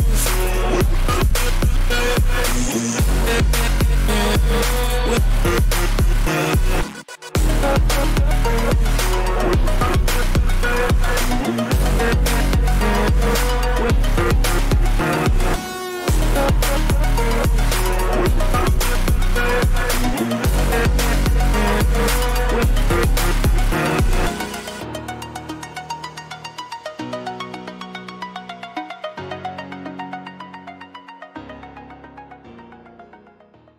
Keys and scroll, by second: 9.8 ctrl+=, 27.8 ctrl+-, 28.0 ctrl+], 32.3 [, 32.5 [.